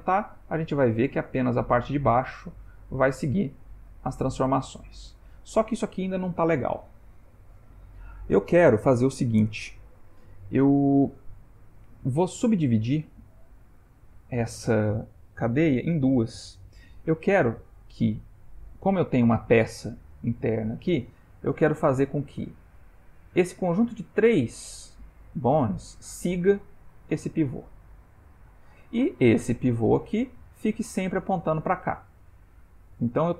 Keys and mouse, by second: 11.9 shift+middle click.